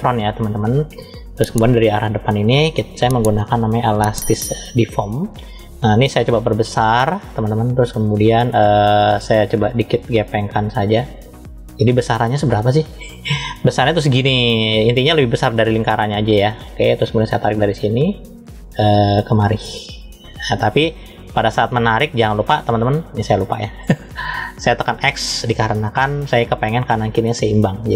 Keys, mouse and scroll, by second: 3.6 click, 6.1 f, 13.7 f, 19.1 click, 22.5 click, 24.7 click.